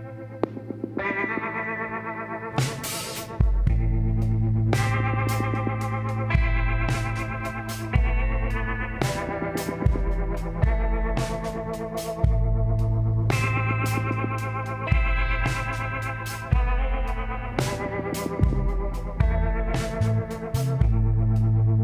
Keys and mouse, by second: 2.5-3.7 middle drag, 4.2-5.6 drag, 5.6-7.0 middle drag, 7.1 middle click, 7.2-9.9 drag, 8.9 w, 16.3-18.7 drag, 17.6 w, 21.7-21.8 drag.